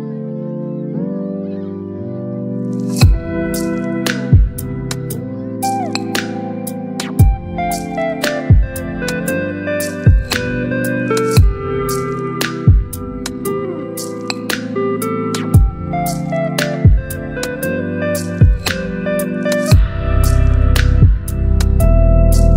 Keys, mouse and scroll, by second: 0.8 ctrl+t, 2.3-5.5 drag, 8.8 Return, 11.8 click, 14.6 click, 16.2-18.3 shift+drag, 20.0-22.5 shift+drag.